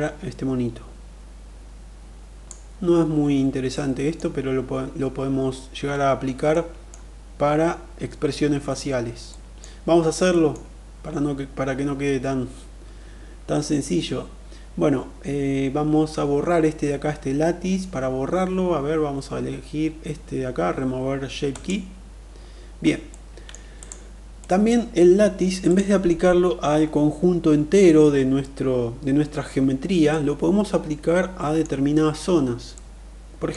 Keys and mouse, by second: 3.4 middle click, 6.1 middle click, 8.9 middle click, 9.8 middle click, 21.2 click, 22.6 middle click, 23.3 click, 23.8-24.3 middle drag, 25.1 click, 29.6-31.3 middle drag, 32.3-33.1 middle drag.